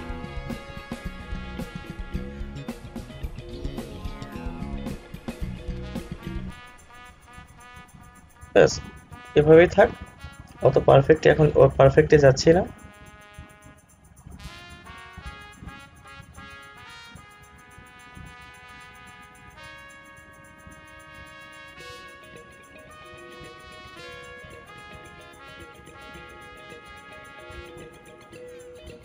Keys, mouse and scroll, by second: 9.8 scroll down 1, 10.1 scroll up 1, 10.7 scroll down 1, 13.5-29.0 drag.